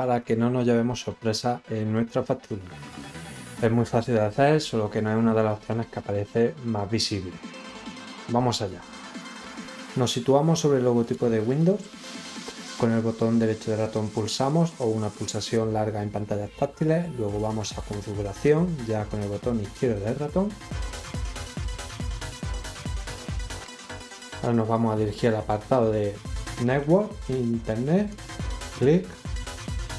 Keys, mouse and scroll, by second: 10.9 right click, 19.1 click, 28.0 click.